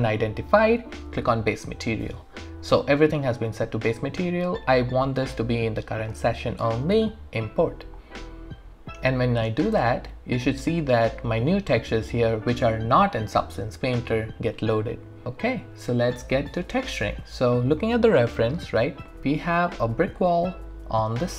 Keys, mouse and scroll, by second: 1.3 click, 4.5 click, 16.8-21.3 alt+drag.